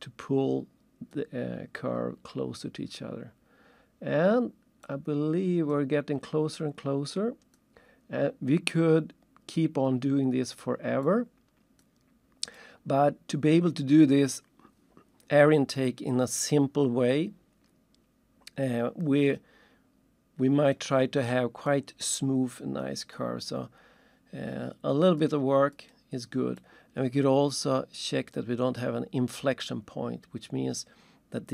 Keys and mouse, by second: 1.1 click, 4.8 click, 6.5 click, 11.0 click, 12.5 click, 20.7 click, 21.7 click, 25.2 click, 25.7 click, 26.6 click.